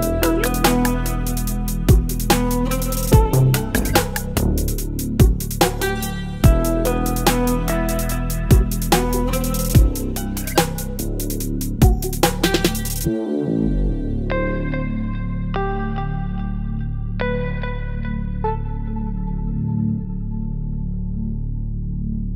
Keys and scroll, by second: 2.3 Delete, 7.9 Delete, 8.9 Delete, 13.0 Delete, 15.3 Delete.